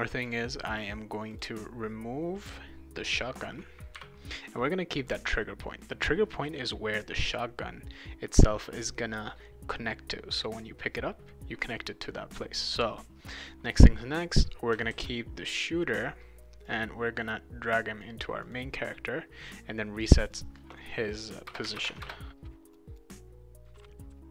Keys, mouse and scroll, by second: 0.7 click, 1.3 click, 2.5 click, 3.1 click, 5.0 click, 12.5 click, 13.3-14.4 right drag, 13.7 a, 14.9 ctrl+s, 16.7-18.0 drag, 18.4 click, 19.4 click, 20.2 click, 20.3 click, 21.6 Tab, 21.8 Tab, 22.6 click, 22.8 click, 22.9 click, 23.4 click, 23.5-24.3 typing, 23.7 right click.